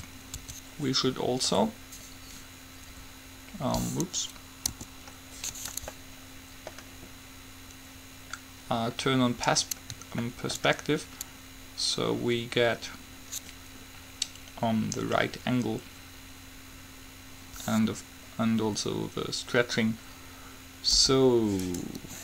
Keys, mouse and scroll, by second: 0.2 Tab, 0.6 Tab, 4.9 KP_5, 21.2 u.